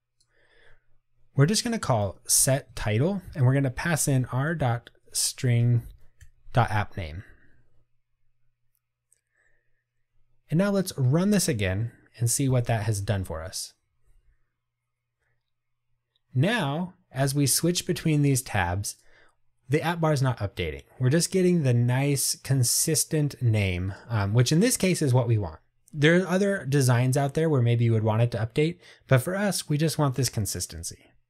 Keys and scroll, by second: 2.8 Tab, 8.2 Return.